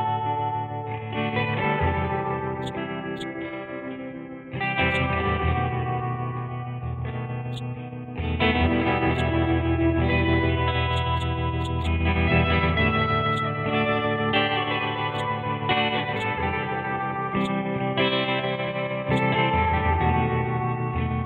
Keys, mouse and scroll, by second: 2.6 click, 4.1-4.6 scroll up 1, 4.9-6.6 drag, 6.6-6.9 scroll down 1, 7.5-10.7 drag, 10.9 click, 13.3 click, 15.1 click, 17.4-21.2 shift+drag.